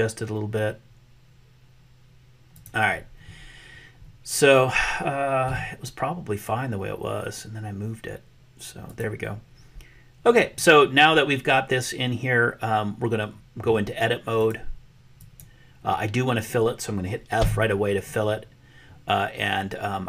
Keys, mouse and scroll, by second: 5.6 g, 14.5-15.5 drag, 17.3 f.